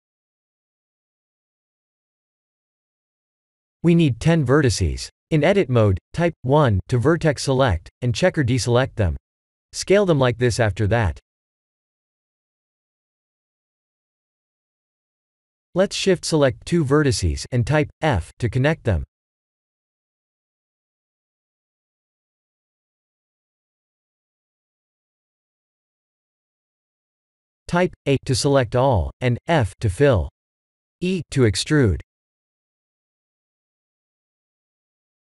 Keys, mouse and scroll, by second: 0.3 scroll down 2, 1.5-2.9 drag, 3.9-4.5 scroll down 2, 4.5 scroll down 1, 5.1 Tab, 7.8-9.4 drag, 10.6 s, 14.3-17.7 middle drag, 18.3 Tab, 19.1 Tab, 20.1 click, 20.7 shift+click, 21.2 f, 21.5 click, 22.3 shift+click, 22.6 f, 22.8 click, 23.6 shift+click, 23.9 f, 24.1 click, 24.7 shift+click, 25.1 f, 25.5 click, 26.0 shift+click, 26.4 f, 26.9 Tab, 27.5-28.0 middle drag, 28.0 Tab, 28.5-29.7 middle drag, 28.8 a, 30.0 middle click, 30.4 f, 31.0-32.9 middle drag, 34.5 e.